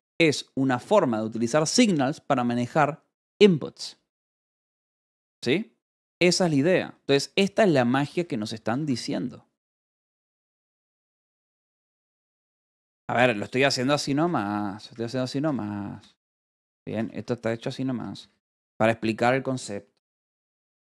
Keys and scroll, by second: 0.9 Escape, 6.5 j, 7.6 j, 8.0 k, 8.6 j, 8.7 Escape, 13.1-17.9 typing, 16.3 Escape.